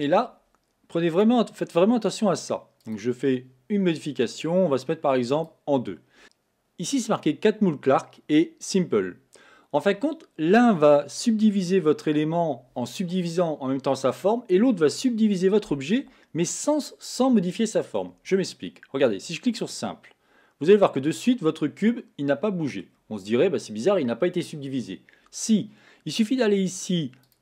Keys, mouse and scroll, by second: 1.3-4.3 drag, 5.5 click, 20.2 click, 21.2-24.1 middle drag.